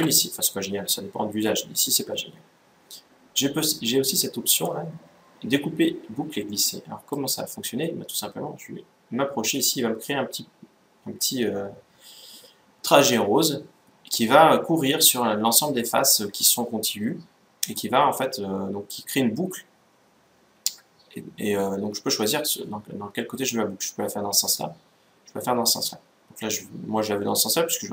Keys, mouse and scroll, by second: 6.7-8.6 drag.